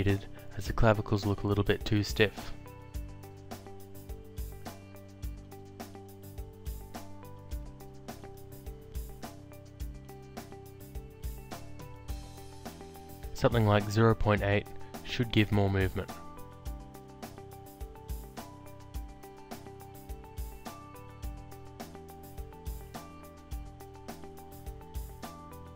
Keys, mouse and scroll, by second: 0.3 alt+click, 2.5 click, 4.1 alt+click, 8.0 click, 9.5 alt+click, 12.1 click, 14.9 click, 16.7 click, 19.2 click, 20.3 BackSpace, 20.7 8, 20.9 Return, 20.9 KP_Enter, 22.3 click, 24.7 click.